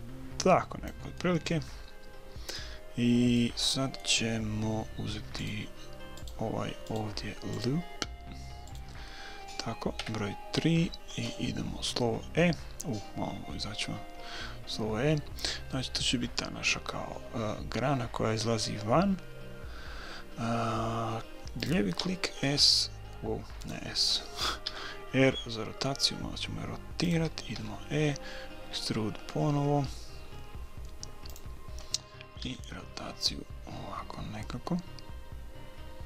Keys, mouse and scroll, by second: 1.1-3.2 middle drag, 3.4-5.2 middle drag, 5.4-10.4 right drag, 9.1-11.2 middle drag, 10.0 KP_3, 13.0-15.2 middle drag, 14.2 e, 17.9 middle click, 22.0 s, 24.6 r, 27.6 e, 32.4 r.